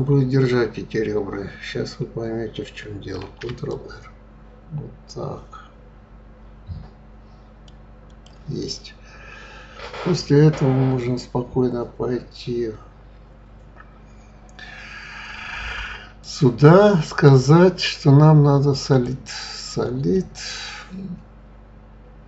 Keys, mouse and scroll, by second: 3.2 ctrl+r, 8.1 click, 16.2 click, 17.1-20.1 drag, 20.1-22.2 middle drag.